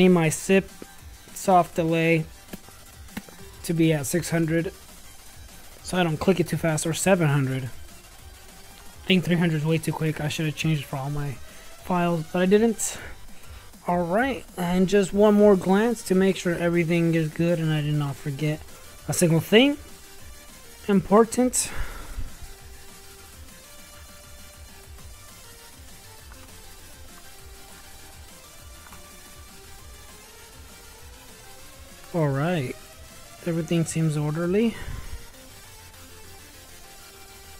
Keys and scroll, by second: 5.6-8.1 typing.